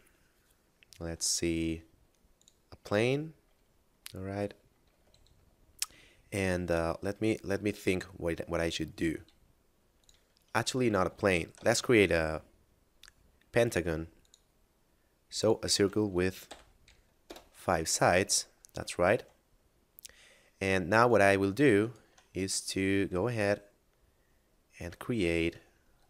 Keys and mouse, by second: 2.2 click, 4.8 Tab, 9.0 s, 9.8 click, 10.6 Tab, 11.0 x, 11.2 click, 11.8 shift+a, 14.2 click, 16.2 5, 17.3 Return, 19.0 Tab, 19.4 middle click, 21.0 right click, 21.7 shift+right click, 22.4 middle click, 25.2 a, 25.8 s.